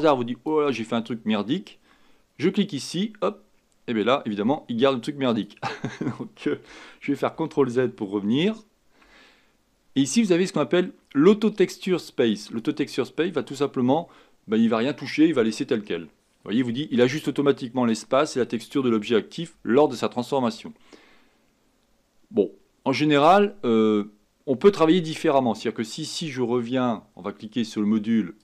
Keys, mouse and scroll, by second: 7.3 ctrl+z, 7.7 ctrl+z, 8.3 ctrl+z.